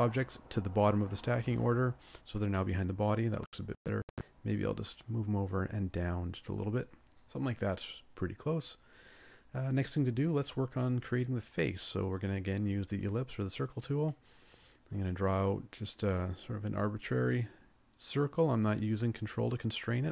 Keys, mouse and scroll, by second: 2.5 middle click.